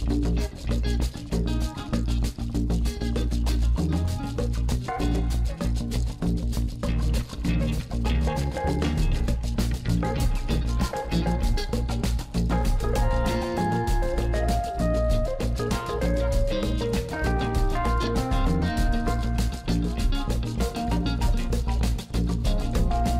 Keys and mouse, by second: 2.2 middle click, 2.8 click, 3.8 middle click, 4.1 Tab, 4.7 KP_1, 5.9 shift+click, 6.5 g, 8.6 shift+middle click, 8.9 Tab, 9.1 middle click, 10.8 click, 11.5 alt+shift+click, 12.3 KP_1, 12.8 g, 14.3 shift+middle click, 14.7 e, 16.0 middle click, 16.7 e, 17.7 e, 20.2 e, 21.0 f, 21.1 click, 21.6-23.1 middle drag.